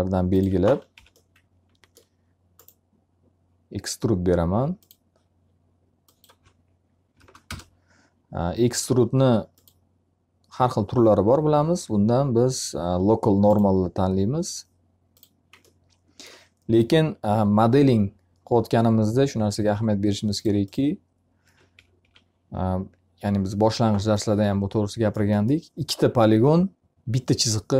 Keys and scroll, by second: 0.4 F3, 6.6 0, 7.4 Return, 21.2 F3.